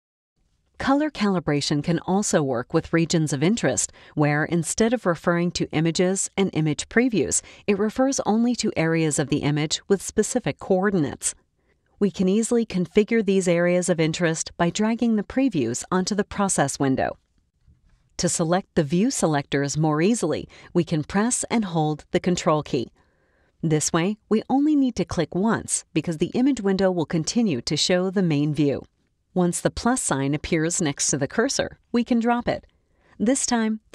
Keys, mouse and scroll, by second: 2.8 middle click, 2.9 click, 3.8 click, 5.2 middle click, 5.2-6.7 drag, 8.6 click, 9.9-10.8 scroll up 1, 11.0 click, 12.6 click, 13.7 click, 17.9 click, 20.8 click, 20.9 scroll up 1, 25.1-33.9 ctrl+drag.